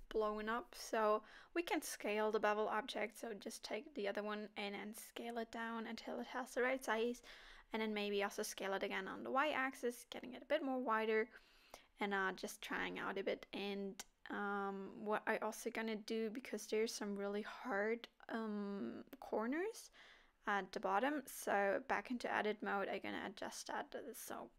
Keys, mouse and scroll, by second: 0.4-1.4 scroll up 1, 1.4-2.4 scroll up 1, 1.4 s, 2.4 middle click, 3.0 click, 3.5 s, 8.3 s, 13.1 scroll down 4, 13.3 middle click, 14.3-15.1 scroll up 3, 14.8 click, 15.1 Tab, 15.5 middle click, 16.6 click, 17.2 g, 18.2 KP_3, 19.4 g, 20.8 click, 21.0 g, 21.6 click, 21.8 g, 22.6 click, 23.0 g, 23.7 click, 24.2 click, 24.3 g.